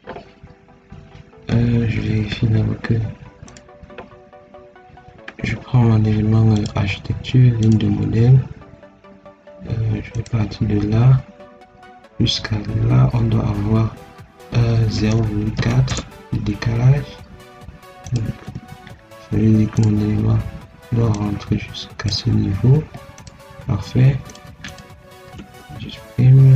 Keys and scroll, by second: 1.8 Escape, 5.2 Escape, 14.9 0, 15.1 ., 15.5 4, 15.8 Return, 18.2 Escape, 22.6 Escape, 25.1 ctrl+x.